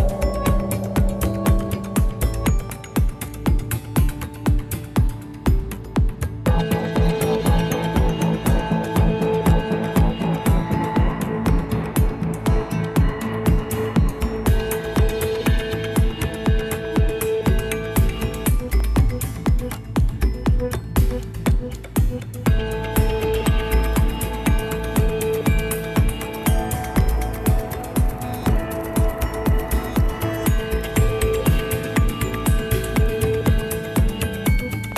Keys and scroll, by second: 19.5 ctrl+c, 24.0 ctrl+v, 24.3 Tab, 25.9 ctrl+v, 26.1 Tab, 32.6 Delete.